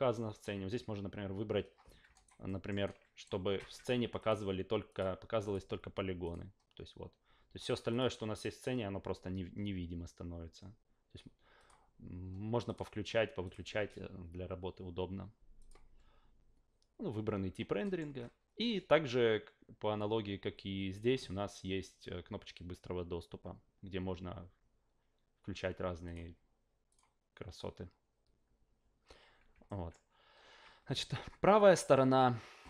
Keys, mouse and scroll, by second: 2.1 alt+right click, 2.4 alt+middle click, 2.8-3.2 alt+right drag, 4.2-5.0 drag, 5.4 click, 6.2 click, 7.9 click, 11.6 click, 12.6 click, 15.6 click, 17.8 alt+middle click, 26.0 click, 26.9 click, 29.6 alt+middle drag.